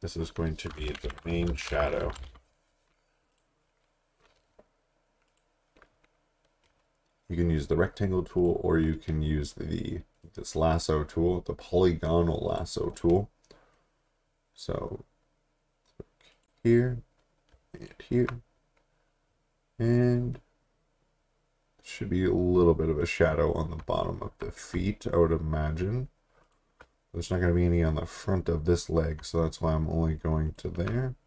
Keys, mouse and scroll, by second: 0.6-2.8 typing, 3.3 click, 8.4 click, 10.2 right click, 14.8 click, 16.3 click, 17.8 shift+click, 23.8 shift+Num_Lock, 26.4 click, 30.4 click.